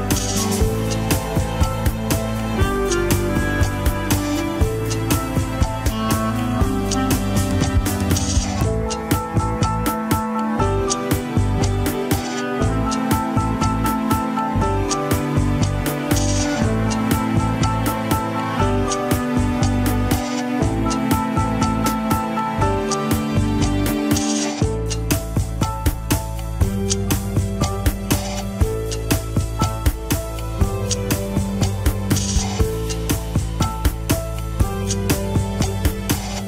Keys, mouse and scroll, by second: 1.8 KP_1, 2.0 scroll up 4, 2.3 ctrl+Tab, 3.0 click, 3.7 ctrl+Tab, 3.9 click, 4.8 drag, 5.5-6.1 shift+middle drag, 6.1 g, 7.6 ctrl+Tab, 7.6 click, 8.4 shift+click, 9.6 ctrl+p, 11.3 click, 11.6 KP_3, 11.8 scroll up 2, 12.1 shift+middle drag, 12.3 scroll up 1, 12.8 ctrl+Tab, 13.0 click, 13.7-14.2 shift+middle drag, 14.2 scroll down 2, 14.4 shift+middle click, 14.6 scroll up 1, 15.2 g, 19.6 middle click, 20.5 KP_3, 20.7 scroll up 1, 20.9-21.4 shift+middle drag, 21.4 g, 24.9-25.8 middle drag, 25.8 g, 28.2 KP_1, 28.3 scroll down 1, 28.6-29.3 shift+middle drag, 29.3 a, 29.6 alt+r, 29.9 scroll down 2, 30.6 click, 33.3 g, 35.5 Tab, 36.2 Tab.